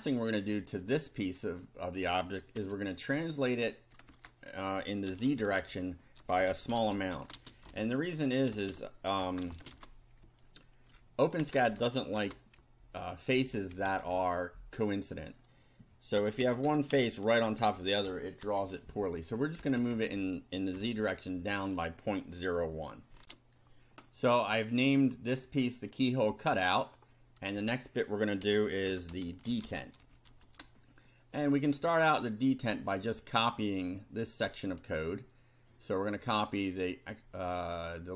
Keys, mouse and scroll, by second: 0.0 click, 0.7 click, 2.6 Tab, 3.3 click, 4.1 Return, 4.9-9.7 typing, 10.2 shift+Down, 11.4 Return, 12.2 shift+], 12.6 shift+Up, 13.9 Down, 14.1 Right, 15.9-19.0 typing, 19.6 Left, 20.7 -, 23.2 ctrl+r, 25.4-26.3 drag, 26.8 click, 27.1-29.1 middle drag, 27.5 Tab, 28.4-30.9 typing, 32.1-34.6 drag, 37.1 click, 38.0-38.1 drag.